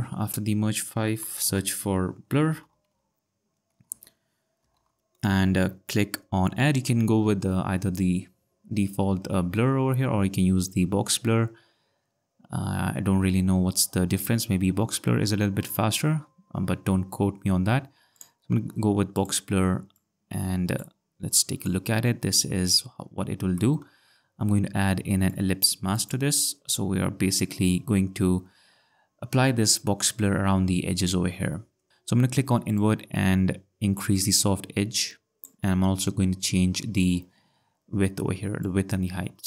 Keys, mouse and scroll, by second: 3.9 l, 3.9 i, 4.5 r, 4.7 BackSpace, 6.0 u, 18.1 click, 19.9 click, 21.3 click, 23.6 click, 23.8 click, 25.3 click, 26.0 click, 32.7 click, 38.6 click.